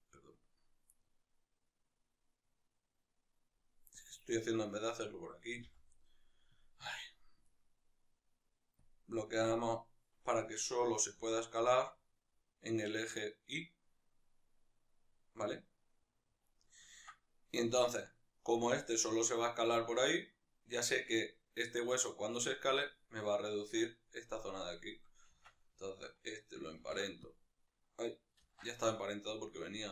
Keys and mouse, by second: 4.0-8.2 drag, 5.6 n, 9.2 click, 10.4 right click, 11.3 s, 16.6 right click, 16.9-22.3 ctrl+middle drag, 18.7 s, 22.3 right click, 25.5 Tab, 25.9-27.3 shift+right drag, 27.3 ctrl+p, 28.5 ctrl+z.